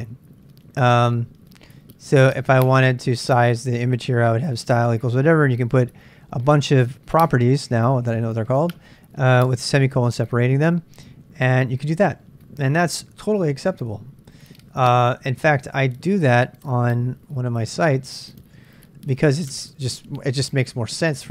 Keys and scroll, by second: 0.4-11.4 typing, 15.7-17.0 typing, 18.7 ctrl+a, 18.7-21.3 typing.